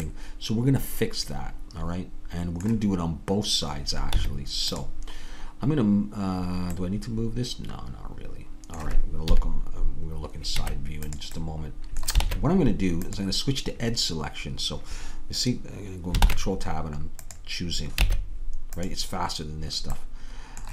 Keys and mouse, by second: 4.1 Tab, 7.4 middle click, 9.3 KP_3, 10.6 Tab, 12.3 ctrl+Tab, 16.3 ctrl+Tab.